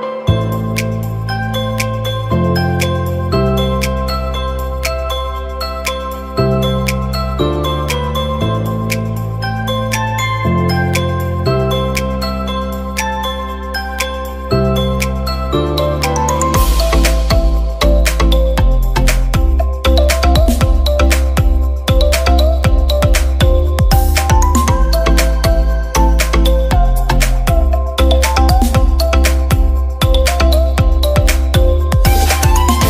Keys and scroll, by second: 13.1 x.